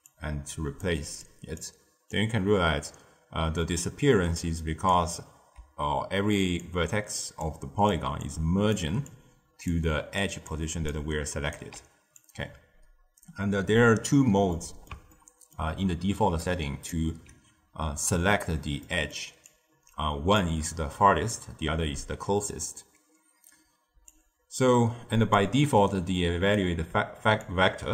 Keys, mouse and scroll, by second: 0.0 drag, 1.2 click, 2.0-5.1 drag, 5.5-11.5 typing, 6.5 click, 7.4 click, 8.2-8.7 drag, 9.0-9.7 drag, 10.1 click, 10.5 click, 11.1 right click, 12.1-14.5 drag, 14.5-16.2 middle drag, 16.2 d, 16.4-16.8 drag, 16.8 d, 18.7-19.4 middle drag, 19.4-22.4 drag, 24.0-25.7 drag, 25.7-27.9 typing, 25.8-26.5 right drag, 27.4 click.